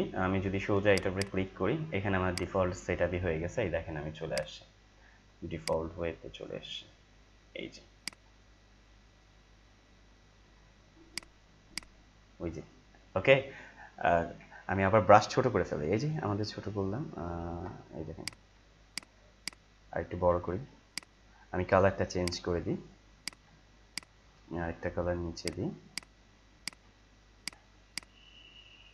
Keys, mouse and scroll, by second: 0.8-8.1 drag, 8.7 click, 8.7-9.1 scroll down 1, 11.1 click, 14.6 ctrl+z, 16.1 [, 16.3-17.1 [, 17.3 [, 17.5 [, 18.2 click, 19.8-20.7 typing, 20.9 click.